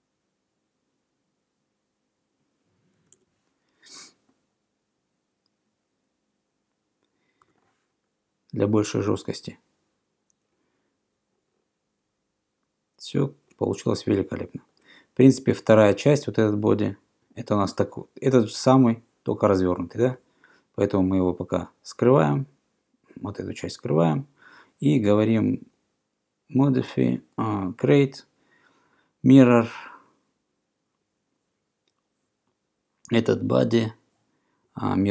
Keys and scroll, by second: 2.9-3.7 typing, 7.5 Return.